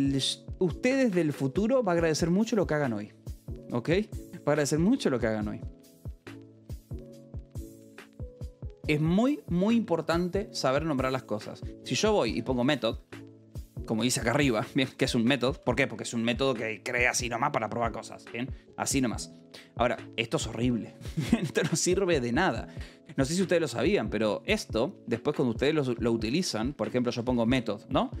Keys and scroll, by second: 11.9-14.0 typing, 13.9 Escape, 16.0 shift+v, 16.2 Escape, 18.3 j, 19.7 a, 20.1 Escape, 20.4 h, 21.0 d, 21.4 Escape, 23.2 k, 24.3 l, 26.1-28.2 typing, 26.5 Return.